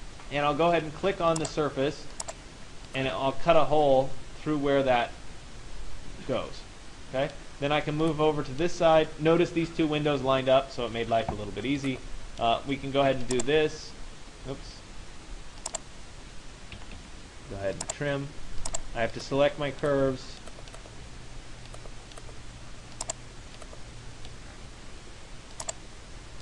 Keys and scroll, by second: 16.4 Escape.